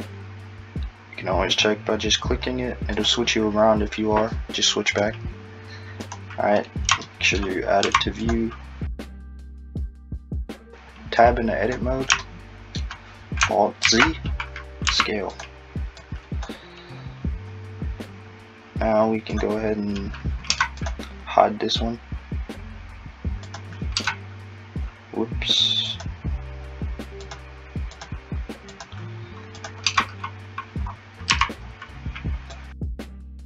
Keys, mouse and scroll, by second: 1.5 click, 8.3 5, 9.4 Tab, 9.8 click, 13.8 alt+z, 14.9 s, 16.0 click, 20.5 Tab, 20.8 click, 23.5 click, 24.1 Tab, 25.9 click, 27.3 click, 27.9 click, 28.7 click, 29.6 click, 29.9 Tab, 30.9-31.3 scroll up 3, 31.3 a, 32.6 click.